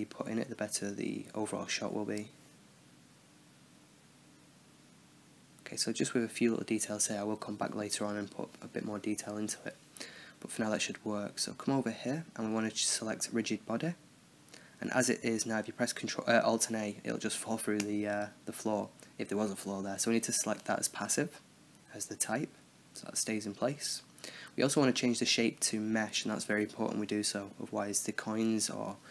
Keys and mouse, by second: 0.0 click, 0.0 right click, 0.4 click, 0.6 click, 0.8 right click, 0.9 x, 1.0 drag, 1.3 right click, 1.4 drag, 1.6 ctrl+z, 1.6 Tab, 1.7 click, 1.8 middle click, 1.9 x, 2.0 x, 2.0 middle click, 2.3 middle drag, 2.5 right click, 2.5 x, 2.6 click, 2.7 middle drag, 3.0 Tab, 3.2 drag, 3.7 click, 4.4 n, 4.4 click, 5.2 click, 5.3-6.7 middle drag, 7.1-8.8 middle drag, 8.8 right click, 9.9-11.1 middle drag, 11.1-14.0 drag, 15.3 alt+a, 16.9-18.6 drag, 19.1-20.2 drag, 20.4 alt+a, 22.1-26.8 drag, 27.1-29.1 middle drag.